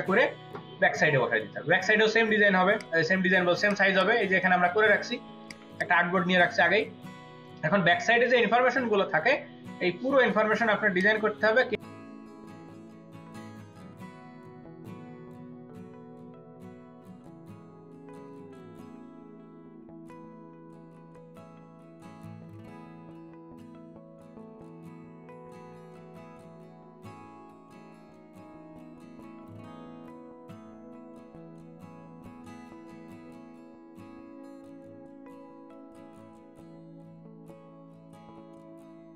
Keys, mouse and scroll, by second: 3.8 space, 4.0 double click, 4.3 space, 5.4 ctrl+alt+click, 7.5 space, 10.0 space, 11.9-12.3 scroll down 3, 12.5-13.7 scroll down 10, 14.1 right click, 14.6 space, 15.9-16.3 scroll down 1, 16.9 space, 17.3 double click, 18.2 ctrl+v, 19.7 v, 20.6 ctrl+t, 29.9 ctrl+t, 30.2 ctrl+alt+click.